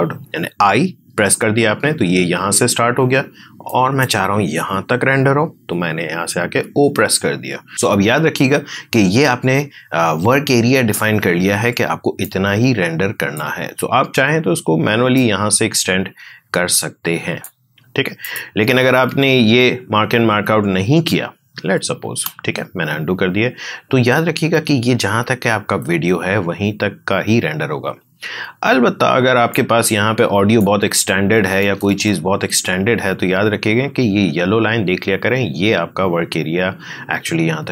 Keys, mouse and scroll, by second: 0.2 ctrl+z, 3.6 click, 5.4 click, 6.4 o, 12.2-18.2 drag, 19.0 ctrl+z, 29.5-31.9 drag, 31.9 ctrl+z.